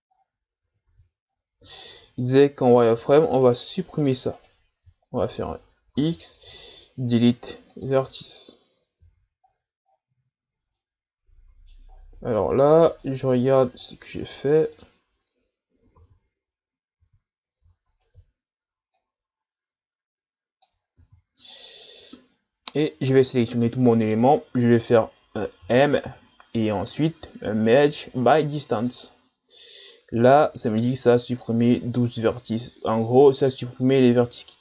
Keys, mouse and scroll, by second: 0.9 a, 1.3-2.2 scroll up 11, 3.3 alt+right click, 3.8 alt+right click, 4.4 alt+right click, 5.9 x, 9.1 z, 9.4-10.3 scroll down 10, 10.8-11.9 middle drag, 11.9-12.5 scroll down 9, 13.0 middle click, 13.8-14.8 scroll up 15, 14.8-16.0 middle drag, 16.0 z, 17.0 z, 17.9 alt+right click, 19.0-21.0 drag, 21.0 ctrl+z, 21.5-22.7 middle drag, 22.7-23.1 scroll down 3, 23.1 a, 23.4 a, 25.6 m.